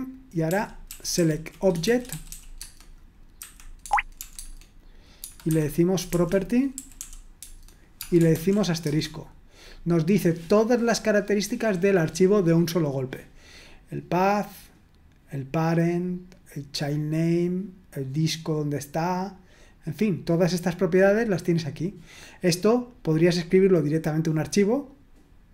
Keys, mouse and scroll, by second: 0.5 ctrl+w, 0.9 ctrl+w, 1.2 ctrl+w, 1.6-4.2 typing, 3.8 Tab, 4.3 Tab, 5.2-8.9 typing, 11.4-12.3 scroll up 1, 16.7-17.5 scroll down 1, 19.4-20.3 scroll down 1, 20.3-21.1 scroll down 1, 21.3-22.1 scroll down 1, 22.9-24.4 scroll down 1.